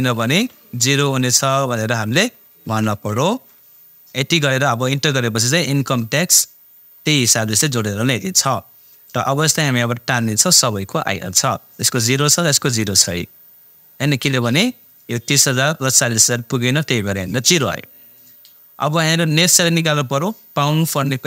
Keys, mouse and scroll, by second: 0.3 ,, 0.8 shift+0, 1.8 BackSpace, 2.1 0, 2.7 shift+0, 9.0-12.1 drag, 16.1 click, 19.5 click.